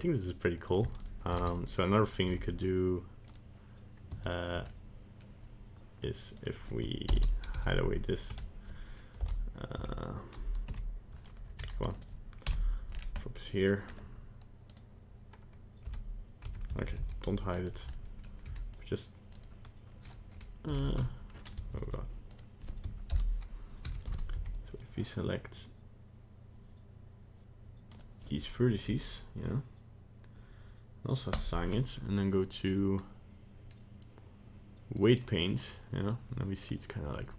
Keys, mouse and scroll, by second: 1.0 right click, 1.5 ctrl+Tab, 1.6 right click, 2.3 Tab, 3.3 right click, 4.3 ctrl+right click, 4.7 middle click, 6.3 right click, 7.0 ctrl+l, 7.6 h, 8.3 Tab, 9.2 KP_Divide, 9.8 Tab, 10.6 KP_Decimal, 11.5 c, 12.4 KP_Decimal, 12.9 scroll down 3, 13.2 middle click, 13.6 right click, 13.8-14.4 scroll up 1, 14.7 right click, 15.9 Tab, 16.5 Tab, 17.0 alt+h, 17.5 scroll up 1, 17.9 middle click, 18.4 c, 20.7 h, 21.8 ctrl+z, 22.3 right click, 23.1 ctrl+l, 23.9 h, 24.8 c, 31.3 click, 32.4 click, 37.2 click.